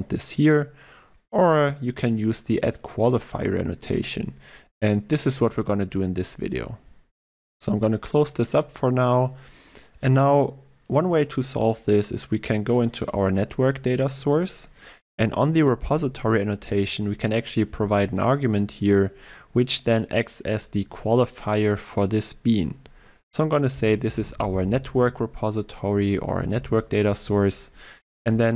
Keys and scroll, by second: 26.6 ctrl+w.